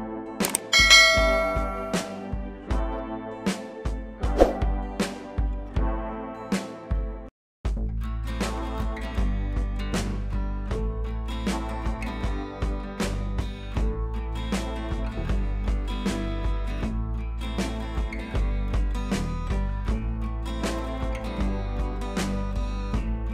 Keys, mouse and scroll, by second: 0.2-2.1 drag, 3.2 scroll down 1, 3.5 scroll up 1, 5.6 click, 6.8-7.8 click, 9.1 w, 9.4 click, 10.0 ctrl+d, 11.0 p, 11.1 scroll up 1, 11.8 click, 12.4-13.2 click, 15.6 space, 15.7-16.1 click, 17.9 scroll down 1, 18.3 click, 20.3 ctrl+z, 21.0 click, 22.1 ctrl+z, 22.9 click.